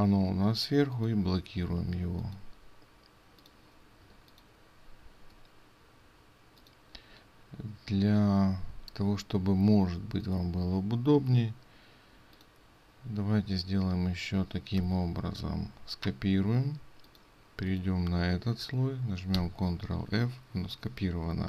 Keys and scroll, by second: 4.2 ctrl+space, 14.8 ctrl+c, 19.4 ctrl+f.